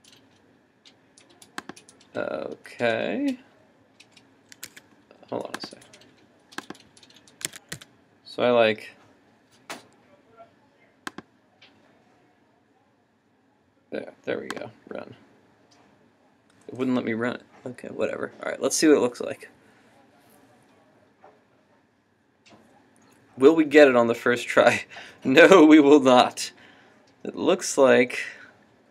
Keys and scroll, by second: 4.7 super+Tab, 7.8 super+s.